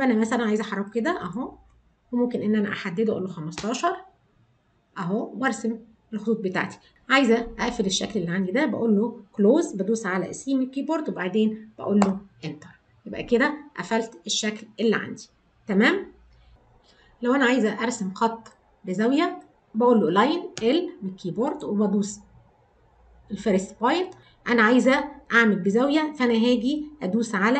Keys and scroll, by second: 10.5 c.